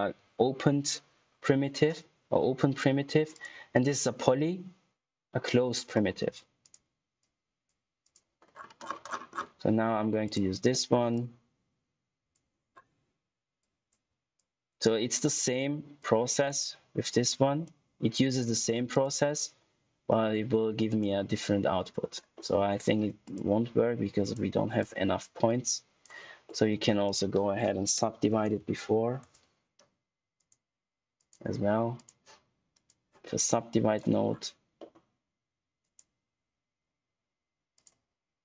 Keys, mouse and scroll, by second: 3.2 click, 6.5 click, 8.6 scroll down 1, 10.2 click, 10.6 middle click, 11.1 click, 12.6-13.5 scroll down 1, 13.5 click, 20.0 middle click, 20.4 scroll up 1, 20.8 click, 22.7 scroll up 1, 23.1 click, 26.4 middle click, 27.0 right click, 27.9-29.0 typing, 29.1 Return, 30.3 click, 34.7 middle click, 34.9-35.6 scroll up 1, 35.7 click, 37.7 click.